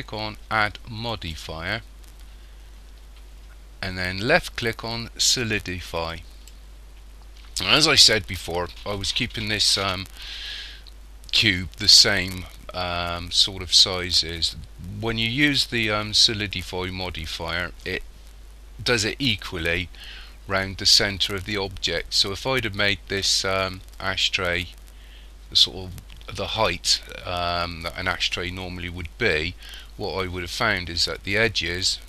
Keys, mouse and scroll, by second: 1.1 click.